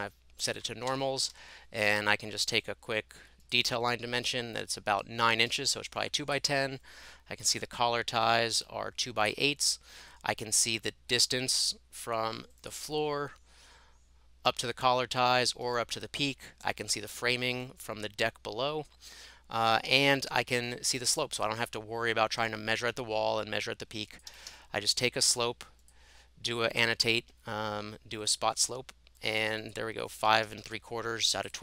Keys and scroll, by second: 0.9-1.4 typing, 3.2-3.9 typing, 5.5 Escape, 8.6 Escape, 15.6 Escape, 24.3 Escape, 24.5 Escape, 30.3 Escape, 30.5 Escape, 30.7 Escape.